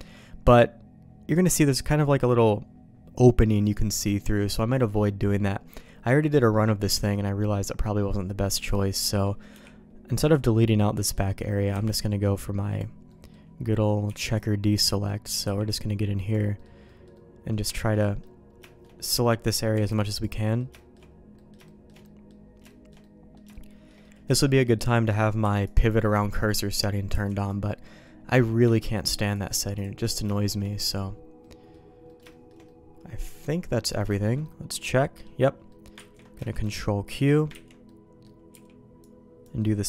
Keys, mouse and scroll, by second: 8.5 click, 9.0 middle click, 9.5 b, 11.1 middle click, 11.7 b, 13.0 middle click, 13.6 middle click, 14.0 b, 14.8 middle click, 15.4 b, 16.8 middle click, 17.1 middle click, 17.6 shift+middle click, 18.0 middle click, 18.6 shift+middle click, 19.2 middle click, 19.7 b, 20.3 middle click, 20.7 shift+middle click, 21.3 middle click, 21.6 shift+middle click, 22.0 middle click, 22.6 shift+middle click, 23.0 middle click, 23.5 shift+middle click, 24.0 middle click, 25.4 b, 27.1 b, 27.6 middle click, 28.6 shift+middle click, 29.2 shift+click, 29.7 click, 30.3 shift+middle click, 30.6 middle click, 31.4 middle click, 32.0 middle click, 32.2 shift+middle click, 32.6-33.9 middle drag, 34.0 shift+middle click, 34.4 middle click, 35.6 middle click, 35.9 ctrl+q, 36.4 shift+middle click, 36.7 middle click, 37.6 ctrl+x, 37.8 middle click, 38.5 b, 39.5 middle click.